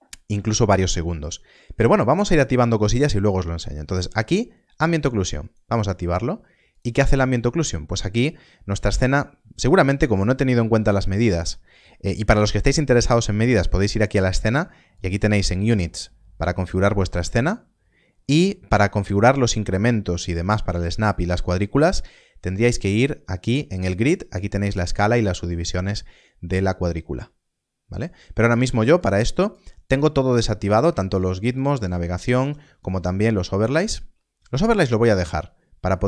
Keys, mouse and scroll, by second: 5.3 KP_0, 5.4 click, 13.7 click, 22.4 click, 28.9 click.